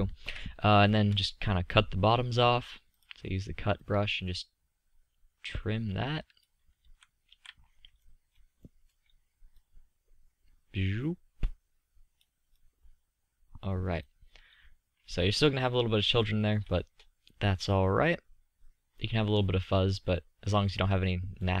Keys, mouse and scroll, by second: 0.1 KP_3, 6.6 z, 7.1 z, 18.5 click, 18.7 click, 19.1-21.6 middle drag.